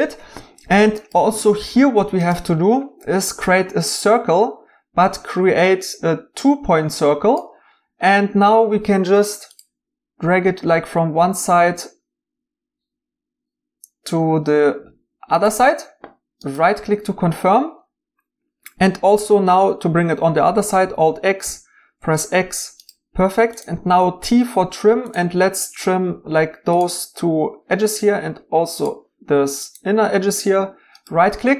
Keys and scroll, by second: 21.4 alt+x, 24.2 t.